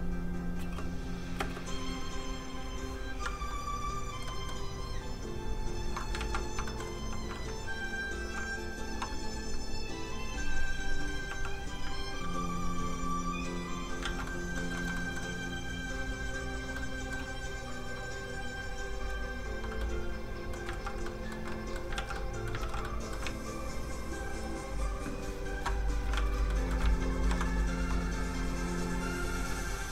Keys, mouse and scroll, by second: 0.2 scroll down 1, 0.6 space, 2.2 click, 4.3 middle click, 4.8 click, 6.2 ctrl+z, 6.7 shift+middle click, 7.0 f, 7.1 click, 7.6 ctrl+click, 8.2 ctrl+z, 8.8 z, 8.9 f, 9.0 click, 9.7 ctrl+click, 11.3 click, 11.4 f, 11.5 click, 11.8 ctrl+click, 12.3 click, 12.4 click, 14.0 ctrl+z, 14.3 middle click, 14.4 middle click, 14.8 shift+middle click, 14.9 middle click, 16.1 click, 16.7 middle click, 17.6 click, 19.8 middle click, 20.7 ctrl+z, 21.0 middle click, 21.1 middle click, 22.0 ctrl+z, 22.1 middle click, 22.6 ctrl+z, 22.8 middle click, 23.7 ctrl+shift+click, 25.9 shift+scroll up 1, 26.1 alt+shift+z, 26.5 alt+middle click, 26.6 middle click, 27.2 ctrl+i, 28.3 click.